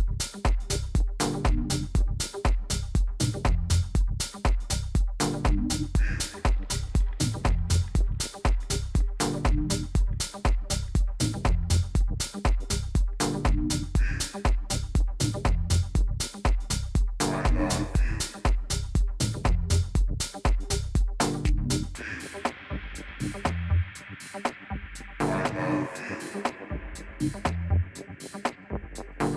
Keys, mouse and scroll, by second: 2.4-6.3 drag, 5.5 Tab, 6.1 a, 6.5 a, 10.6-12.5 drag, 14.2-16.1 drag, 18.7-20.6 drag.